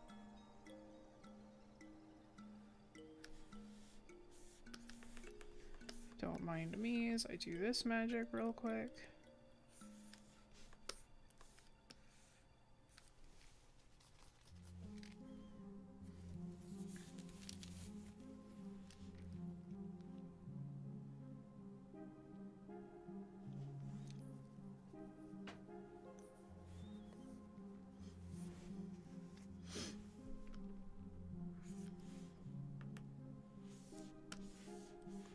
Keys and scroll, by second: 5.1 scroll down 1, 7.1 scroll, 7.1 scroll up 1, 10.8 scroll, 32.9 scroll down 1.